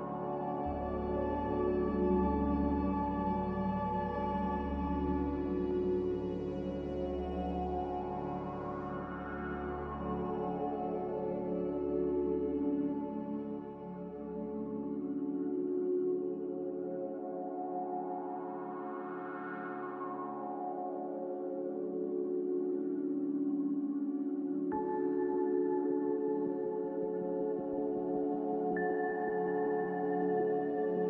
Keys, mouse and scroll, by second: 0.4 click, 1.0 click, 3.2 click, 3.6 click, 10.8 Escape, 10.9 Escape, 11.0 Escape, 11.4 b, 12.6 Delete, 13.2 Delete, 13.6 Delete, 14.6 m.